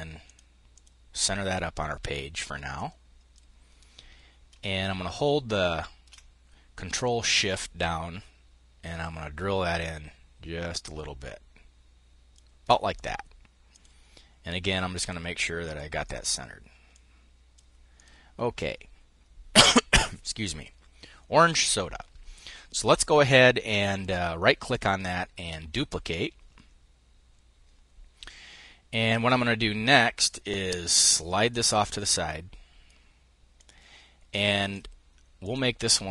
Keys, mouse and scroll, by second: 2.3-3.9 drag, 4.1 ctrl+shift+click, 6.4 click, 7.4-15.3 ctrl+shift+drag, 15.6 click, 16.4-17.8 drag, 23.4 click, 25.6 click, 29.8-33.0 drag, 33.1-35.1 drag.